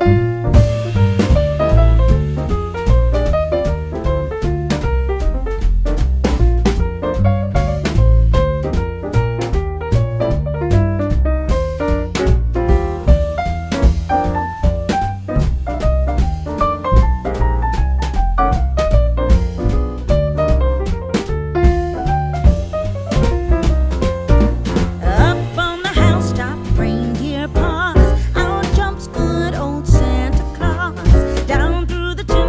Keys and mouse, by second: 0.6 click, 0.9 z, 2.1 click, 2.4 r, 2.8 click, 3.2 s, 4.6 g, 4.9 y, 5.8 click, 6.2 right click, 6.6 click, 7.4 middle click, 7.8 click, 11.1 click, 12.8 shift+right click, 13.6 shift+a, 14.7 click, 15.9 KP_7, 16.7 shift+middle click, 17.6 g, 19.0 click, 19.4 s, 22.2 click, 23.0 middle click, 24.4 g, 24.7 z, 25.6 click, 25.9 Tab, 27.2 f, 28.5 e, 32.0 click.